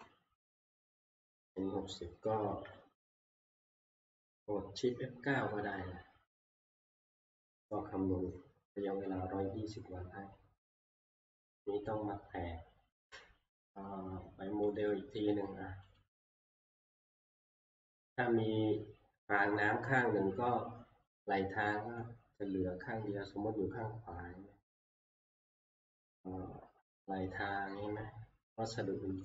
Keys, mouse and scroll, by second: 1.7 Right, 1.8 Right, 6.8 click, 11.1 click, 14.8 click, 16.0 click, 17.1 click, 18.0 F12, 22.0 click, 22.7 scroll, 23.2 middle click, 24.4 middle click.